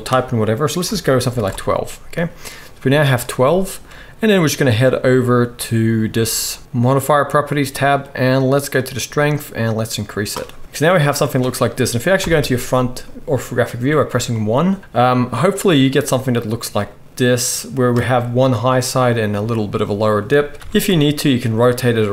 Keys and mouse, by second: 7.2-8.8 middle drag, 8.8-22.1 drag, 12.2 KP_1, 20.6 r.